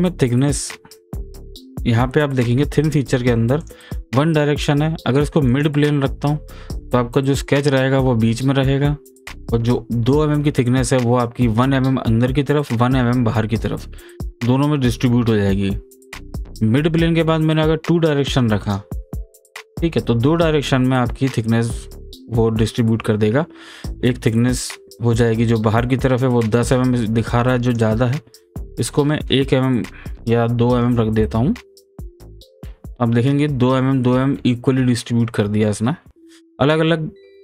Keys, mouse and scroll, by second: 3.6 click, 16.3 click, 18.6 click, 27.3-30.1 drag, 32.2 click, 36.6 click.